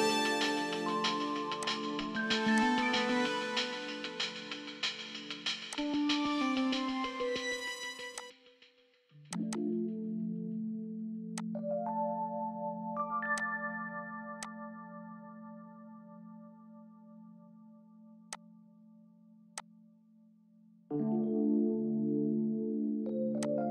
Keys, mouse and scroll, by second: 3.6-4.0 scroll up 1, 4.0 middle click, 4.3-5.0 scroll up 1, 5.0-5.7 scroll down 1, 6.3-6.7 scroll up 1, 6.7 middle click, 7.1-8.3 scroll up 1, 9.6 double click, 10.5-11.1 typing, 14.9 middle click, 20.4-20.9 scroll down 1.